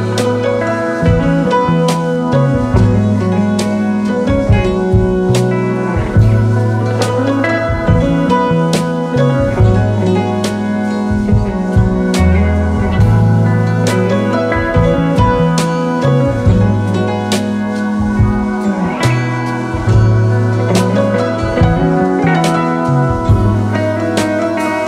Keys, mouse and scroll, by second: 0.4 double click, 1.2 double click, 2.4-2.8 alt+scroll down 2, 2.6 space, 4.2 double click, 8.1 space, 8.3-8.7 alt+scroll up 2, 8.6 space, 9.8 shift+click, 13.2 double click, 23.5 ctrl+a, 23.9-24.8 typing.